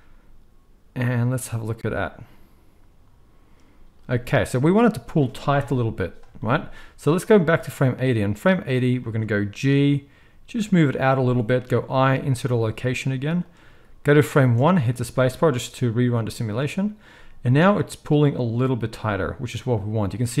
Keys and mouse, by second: 4.0 space, 5.5 KP_1, 7.4-11.1 drag, 9.8 g, 11.1-13.4 middle drag, 11.6 i, 13.4-20.4 drag, 14.4 space.